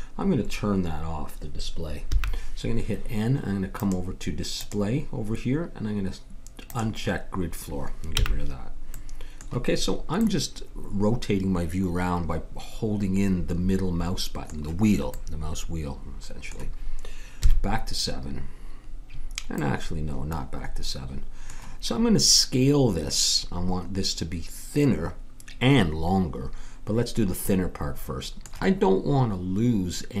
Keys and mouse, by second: 2.0 n, 3.7-6.3 drag, 6.6-8.1 drag, 8.1 n, 8.9-10.2 middle drag, 15.2 middle click, 17.3 KP_7, 20.9 middle click, 27.5-30.2 middle drag.